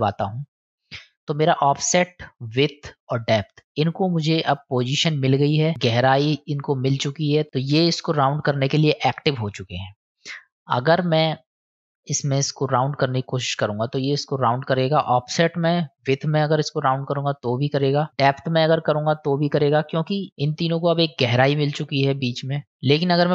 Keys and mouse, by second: 1.1-4.4 drag, 12.6-14.7 drag, 15.3 click, 16.7-17.8 drag, 18.1 click, 19.1-20.1 drag, 22.7-23.3 drag.